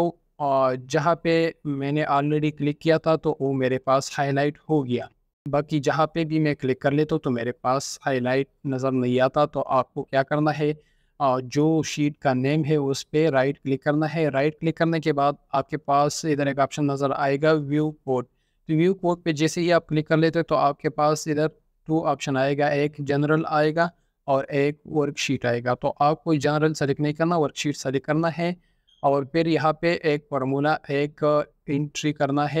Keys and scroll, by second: 1.5 scroll up 1, 32.0-32.6 typing.